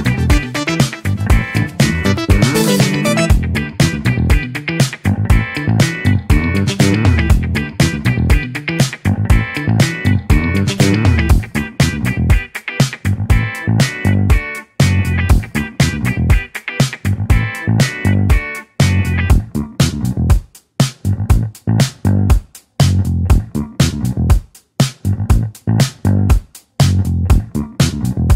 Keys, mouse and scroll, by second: 0.9-2.3 right drag, 2.5-4.9 right drag, 4.9-7.3 drag, 7.9-8.6 scroll down 2, 8.6-9.9 scroll up 3, 9.9 Tab, 10.4-11.1 scroll down 6, 11.1-11.8 middle drag, 11.8-12.4 scroll down 2, 12.4-12.8 scroll up 3, 12.8-13.3 middle drag, 13.3-13.9 scroll down 6, 14.4-15.0 drag, 15.0-16.2 scroll up 5, 16.2-16.8 scroll up 2, 19.3-19.9 middle drag, 19.9-20.2 scroll up 2, 20.2-20.8 middle drag, 20.8 shift+a, 26.4 click, 27.6-27.9 scroll down 3, 27.9-28.3 middle drag.